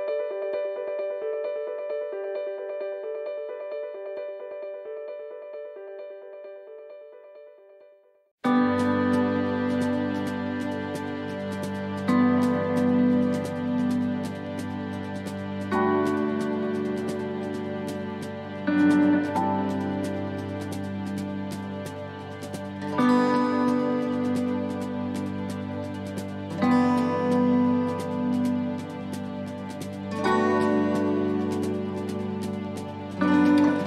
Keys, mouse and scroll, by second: 10.0 x, 10.5 middle click, 11.6 scroll down 1, 12.7 click, 14.6 right click, 15.0 scroll down 3, 16.1 click, 19.1 middle click, 20.3 middle click, 22.9 middle click, 23.6-24.2 scroll up 3, 24.0 middle click, 24.5-25.8 scroll down 8, 25.6 middle click, 26.6 middle click, 27.1 shift+middle click, 27.2 shift+middle click, 27.5 scroll up 3, 28.0 shift+middle click, 29.3 click, 30.2 scroll down 2, 31.0 right click, 31.9 x.